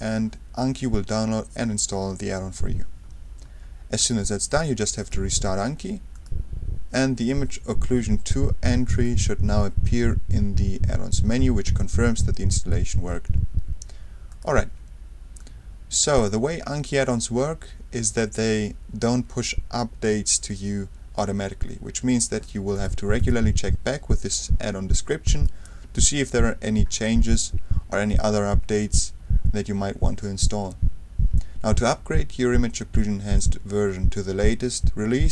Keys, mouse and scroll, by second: 4.0 click, 5.0 click, 6.1 click, 8.9 click, 14.3 click, 15.4-16.8 drag, 22.7 click, 24.3-26.0 drag, 27.0-27.5 scroll down 1, 27.7-28.3 scroll down 1.